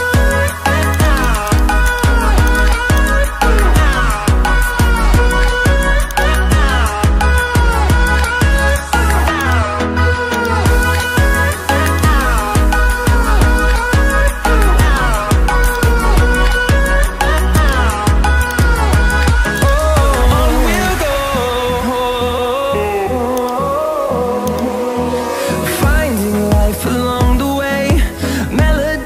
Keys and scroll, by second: 4.6 ctrl+alt+z, 4.8 ctrl+alt+z, 16.6 ctrl+alt+z.